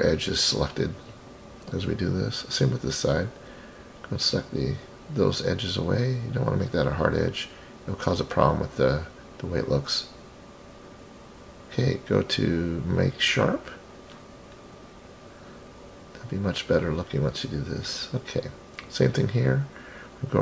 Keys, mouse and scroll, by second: 1.5-2.6 middle drag, 3.1 scroll up 4, 3.8 ctrl+click, 4.8-5.9 ctrl+drag, 6.6 ctrl+click, 8.1 ctrl+click, 9.6 ctrl+click, 10.3-11.4 scroll down 4, 11.4-12.9 right drag, 11.4 scroll down 2, 13.3-13.7 scroll up 4, 14.1-15.3 middle drag, 15.7-16.3 scroll down 4, 17.1 click, 17.3 click, 18.4-19.0 scroll up 1, 19.0 scroll up 2, 19.9 click.